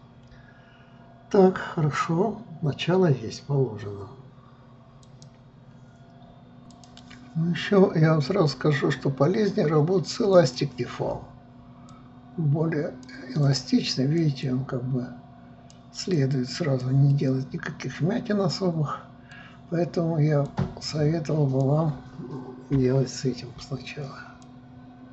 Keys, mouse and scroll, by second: 10.5-17.3 drag, 17.3-20.3 middle drag, 20.6-22.9 drag, 22.9 KP_3, 24.6-25.1 drag.